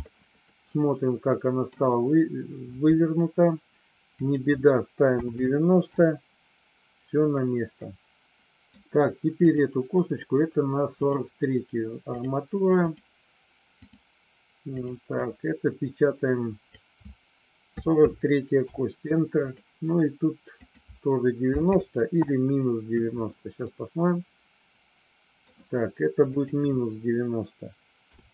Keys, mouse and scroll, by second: 0.7-1.7 middle drag, 4.2-7.3 drag, 7.8 middle click, 9.4 click, 11.1-12.3 drag, 12.7-13.9 drag, 14.7-19.5 drag, 20.4-23.2 drag, 23.5-25.4 middle drag, 26.2-28.3 drag.